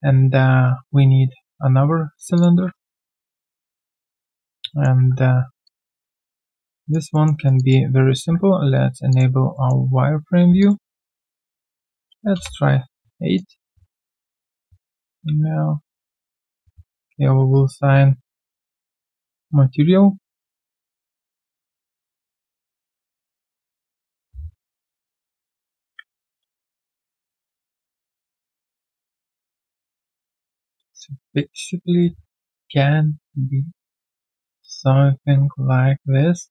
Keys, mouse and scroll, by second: 0.6 shift+right click, 2.7 shift+right click, 4.7 alt+middle click, 5.6 alt+click, 7.1 alt+middle click, 7.3 alt+right click, 7.5 alt+click, 9.5 alt+middle click, 12.3 Return, 13.2 alt+right click, 13.9 alt+click, 14.3 alt+right click, 14.6 alt+middle click, 16.8 typing, 16.9 right click, 21.5 alt+middle click, 21.8 alt+right click, 22.1 alt+click, 22.5 alt+middle click, 22.8 alt+click, 23.7 w, 31.0 alt+click.